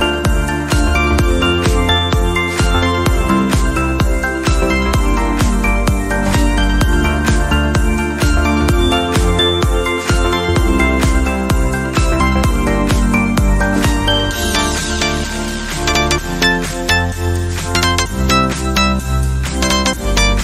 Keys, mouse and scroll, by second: 1.0 scroll up 3, 1.2-1.7 shift+middle drag, 1.7 g, 2.8 click, 3.1-4.0 scroll down 4, 4.0 scroll down 2, 4.1 shift+middle drag, 4.3 scroll up 1, 4.6 drag, 5.1 s, 6.9 g, 7.8 r, 8.3 click, 8.4 scroll down 4, 8.6 shift+middle click, 9.1 click, 9.3-9.6 shift+middle drag, 9.6-10.0 scroll up 1, 10.1 shift+d, 11.1 scroll up 3, 11.3 shift+middle click, 11.8 r, 13.3 s, 14.2 g, 15.6 scroll down 3, 15.8-16.3 shift+middle drag, 16.3 drag, 16.6 drag, 16.8 drag, 17.0 click, 17.6 shift+d, 18.3 scroll up 2, 18.4-19.0 shift+middle drag, 19.0 r, 19.8 g.